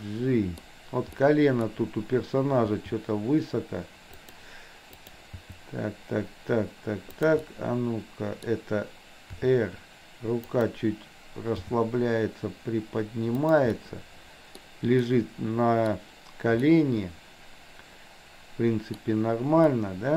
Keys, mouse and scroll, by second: 1.2 middle click, 2.8 g, 5.1 click, 5.3 g, 7.4-8.4 middle drag, 9.4 r, 11.7 g, 13.7 scroll up 1, 13.8-14.7 middle drag, 15.1 scroll up 1, 15.2-15.9 middle drag, 16.7-18.9 middle drag, 18.9 scroll down 1, 19.7 scroll up 1, 19.8-20.1 middle drag.